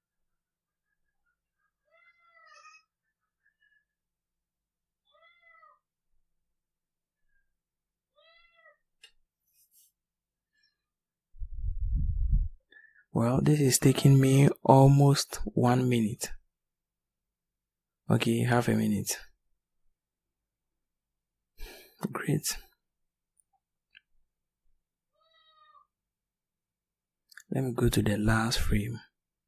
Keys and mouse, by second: 24.7-26.7 drag.